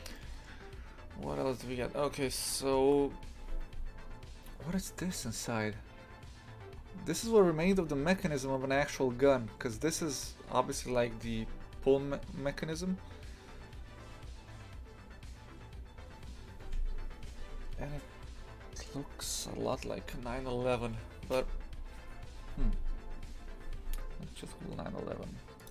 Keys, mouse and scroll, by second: 0.2-6.8 shift+middle drag, 6.8-7.6 scroll down 2, 7.6-11.5 scroll up 1, 11.5-25.7 scroll up 1.